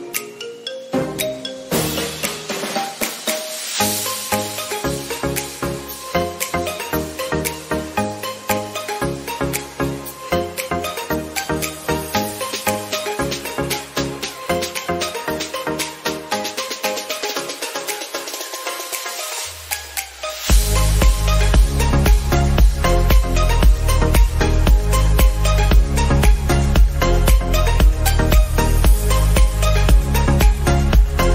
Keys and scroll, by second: 2.9 ctrl+0.